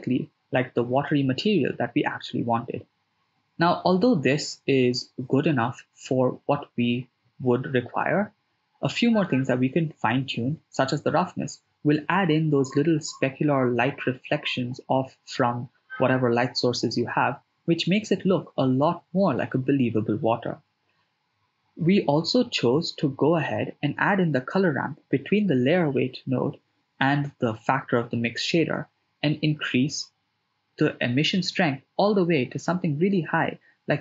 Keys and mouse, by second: 0.3 shift+space, 1.0 shift+space, 2.1 shift+space, 3.1 shift+space, 4.6 shift+space, 5.2 shift+space, 6.2 shift+space, 8.4-11.4 drag, 11.8 shift+space, 23.3-24.4 ctrl+middle drag, 25.6 shift+middle click, 26.6-28.3 ctrl+middle drag, 28.7 ctrl+middle click, 30.1 ctrl+middle click, 31.1 middle click, 32.6 ctrl+middle click, 33.8-34.0 drag.